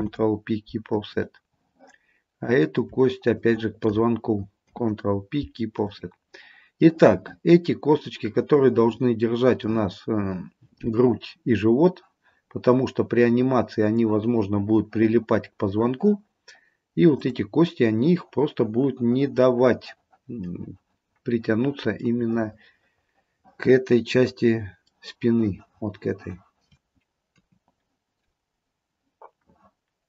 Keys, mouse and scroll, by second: 0.0 ctrl+p, 2.6 click, 3.4 shift+click, 4.7 ctrl+p, 6.9 middle click, 17.2 click, 22.1 middle click, 27.4 KP_3.